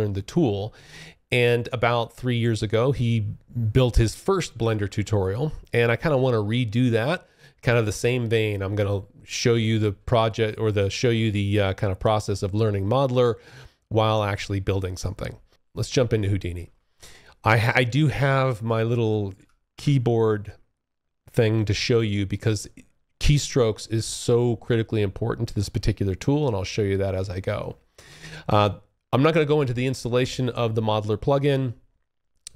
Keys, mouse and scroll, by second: 1.4 click, 15.5 alt+Tab, 18.5 s, 18.8 d.